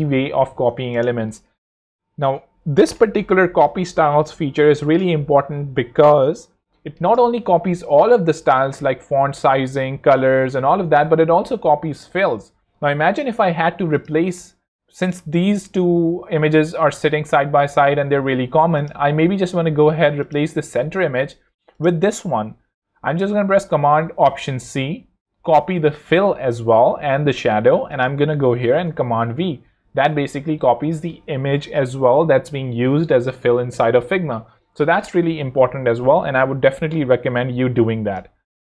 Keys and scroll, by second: 24.4 alt+super+c, 28.6 super+v.